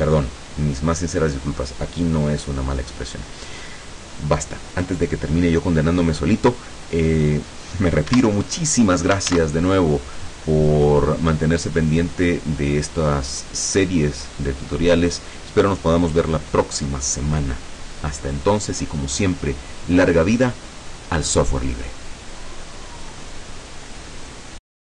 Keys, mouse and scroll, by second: 8.2 Escape, 9.4 ctrl+s, 9.7 ctrl+click.